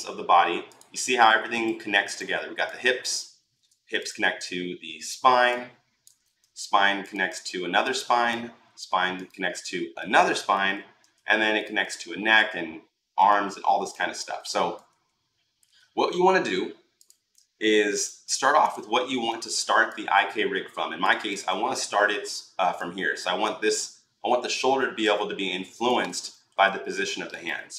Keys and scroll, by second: 3.3 ctrl+z, 6.2 ctrl+z, 8.4 ctrl+z, 10.8 ctrl+z, 13.8 ctrl+z, 21.8 r, 25.8 ctrl+z.